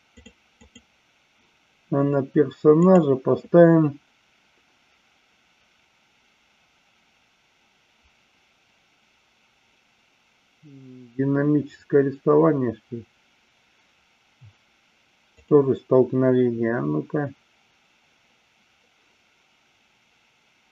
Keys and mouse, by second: 0.6 click, 2.8 click, 15.3-18.7 drag.